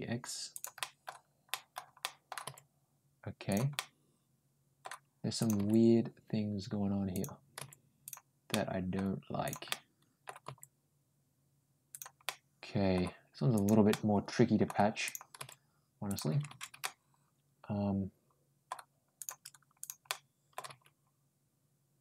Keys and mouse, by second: 0.6 middle click, 1.3 middle click, 1.8 middle click, 2.3 g, 3.6-4.7 middle drag, 5.2 click, 5.4 g, 7.4 g, 8.3 middle click, 9.3 click, 9.5 middle click, 10.3 g, 12.1 middle click, 13.4 click, 13.7 middle click, 14.9 click, 15.2 g, 16.6-18.5 middle drag, 19.0 click, 19.6 ctrl+click, 19.9 ctrl+middle click, 20.5 g.